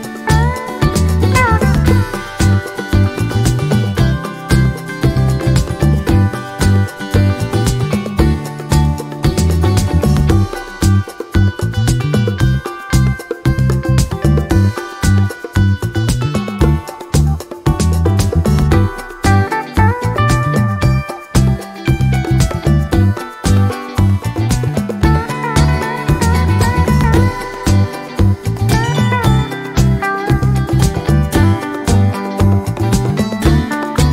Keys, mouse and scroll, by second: 0.1 click, 1.3 ctrl+click, 1.7-2.0 ctrl+scroll down 2, 2.6-3.7 ctrl+shift+drag, 4.0-5.8 ctrl+shift+drag, 6.0-6.4 ctrl+scroll up 2, 7.1 ctrl+shift+click, 7.8 ctrl+shift+click, 9.2 ctrl+shift+click, 10.0 ctrl+shift+z, 10.2 ctrl+shift+click, 11.1 ctrl+shift+click, 12.2 ctrl+shift+click, 13.3 click, 14.1 click, 14.5 click, 14.9-15.2 ctrl+scroll down 2, 15.4 ctrl+click, 17.8 click, 20.3 click, 20.9 click, 21.8-23.2 drag, 23.5-26.6 drag, 28.0-30.9 drag, 31.1 click, 31.7 shift+click, 32.6 shift+click, 33.5 ctrl+shift+g, 33.9-34.1 ctrl+shift+drag.